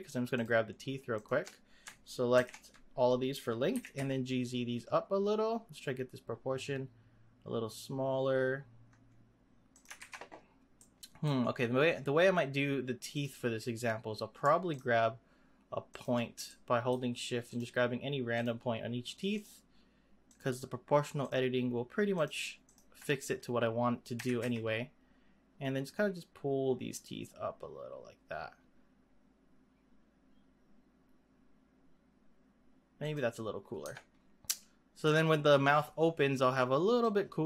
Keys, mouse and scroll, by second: 0.3 shift+click, 1.1 shift+click, 2.3 ctrl+l, 3.7 g, 10.0 ctrl+z, 10.8-12.0 middle drag, 12.0-12.6 scroll up 1, 12.6-13.1 scroll up 1, 13.1 click, 14.6 shift+click, 15.9 shift+click, 16.5-17.5 shift+middle drag, 17.5 shift+click, 18.3 shift+click, 19.3 shift+click, 20.2 shift+click, 21.1 shift+click, 22.1 shift+click, 22.6 shift+click, 23.1 scroll down 2, 24.1 g, 33.4-33.8 scroll down 1, 33.8 Tab, 34.2 scroll down 2, 34.5-37.0 middle drag, 37.0-37.4 drag.